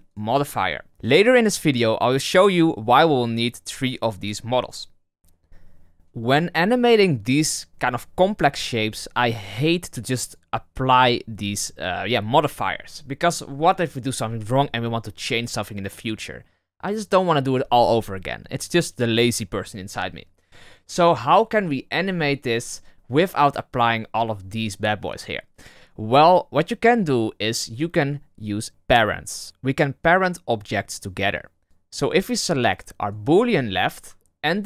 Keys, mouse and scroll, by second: 0.0 click, 10.2-13.3 drag, 28.7 right click, 31.6 click, 32.3 click, 32.9 right click.